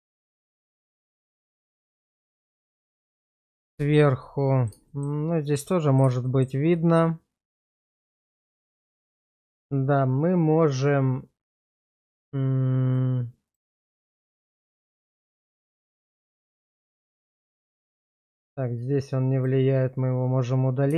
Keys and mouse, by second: 0.8 shift+middle drag, 1.2-2.4 middle drag, 3.0 /, 4.2-4.7 middle drag, 4.9 middle drag, 5.6 middle click, 6.2 middle drag, 6.7-9.0 middle drag, 9.2 shift+middle drag, 12.9 click, 13.5 click, 14.4 middle click, 15.1 shift+middle drag, 15.5 middle click, 16.8 click, 17.7 click, 18.1 click, 19.3 click.